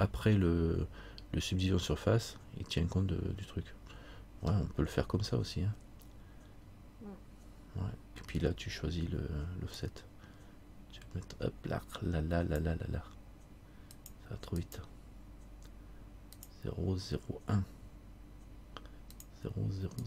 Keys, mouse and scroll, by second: 1.6 scroll up 1, 4.7-7.9 scroll down 1, 9.9 click, 14.1 click.